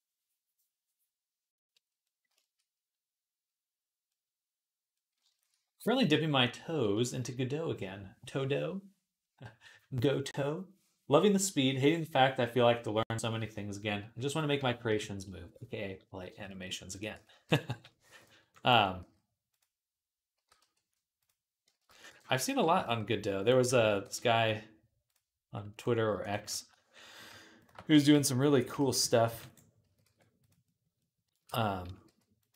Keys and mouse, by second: 5.1-16.8 shift+drag, 14.7 KP_3, 16.8 middle click, 16.8-19.3 right drag, 17.0 Tab, 17.3 z, 18.2 b, 18.8 s, 19.3-23.6 drag, 20.2 g, 21.5 ctrl+z, 21.9 b, 22.4 s, 23.5 ctrl+z, 23.6-26.4 right drag, 26.1 alt+shift+click, 26.1 alt+shift+middle click, 26.4-28.8 shift+drag, 27.7 s, 28.6 ctrl+z, 29.1 ctrl+r, 29.3 click, 29.4-30.8 middle drag, 29.6 s, 31.7 s, 32.4 g.